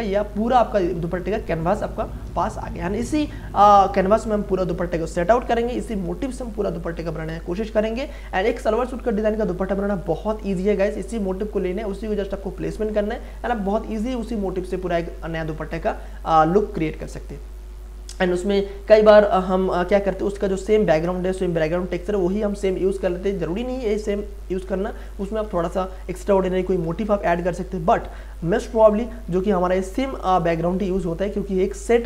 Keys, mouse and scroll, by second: 0.0 click.